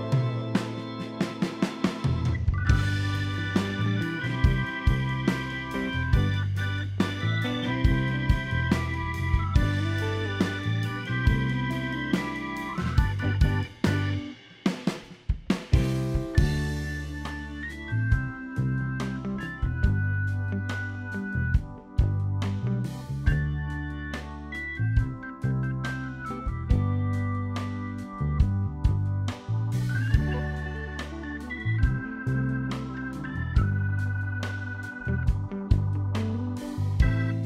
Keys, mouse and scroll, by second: 0.1 click, 0.5 middle click, 1.0 click, 1.4 click, 2.5 middle click, 3.2 click, 3.6 middle click, 4.6 scroll up 1, 4.7 middle click, 5.1 click, 6.0 click, 6.8 click, 7.2 click, 7.7 scroll down 3, 7.7 middle click, 8.3 KP_7, 9.0 g, 9.6 click, 10.2 click, 10.9 click, 11.2 scroll up 1, 11.5 middle click, 11.5 scroll down 1, 11.6 middle click, 11.9 ctrl+z, 12.6 ctrl+KP_7, 12.9-13.4 scroll up 5, 13.7 click, 14.2 click, 15.3 click, 15.8 click, 16.5 click, 17.0-17.3 scroll down 3, 17.1 middle click, 18.2 click, 19.8 click, 20.5 scroll down 3, 20.6 middle click, 20.8 shift+middle click, 21.0 middle click, 21.2 scroll up 3, 21.4 click, 21.9 click, 22.9 scroll down 2, 23.0 middle click, 24.4-24.9 scroll down 4, 24.5 middle click, 24.5-25.0 scroll up 4, 25.0 middle click, 25.2 shift+middle click, 25.3 middle click, 26.0 click, 26.9 r, 27.8 e, 28.4 click, 28.9 middle click, 29.5 shift+middle click, 29.7 scroll up 3, 29.8 scroll down 3, 29.9 shift+middle click, 30.1-30.6 scroll up 2, 30.4 click, 31.3 click, 32.1 middle click, 33.4 g, 33.8 middle click, 34.4 ctrl+r, 35.3 middle click, 36.6 click.